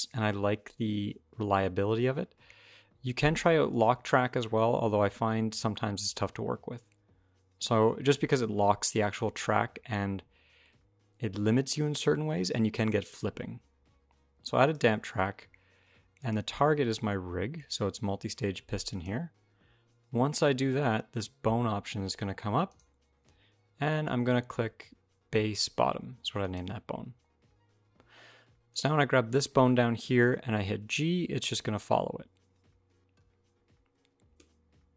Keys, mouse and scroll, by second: 16.0 click, 22.5 click, 28.5 click, 30.0 g.